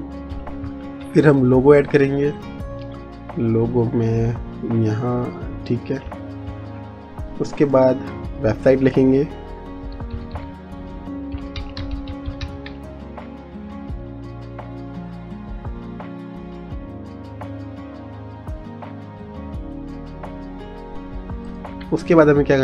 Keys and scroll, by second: 1.1 ctrl+v, 10.0 w, 11.2-13.7 typing, 17.0 Return.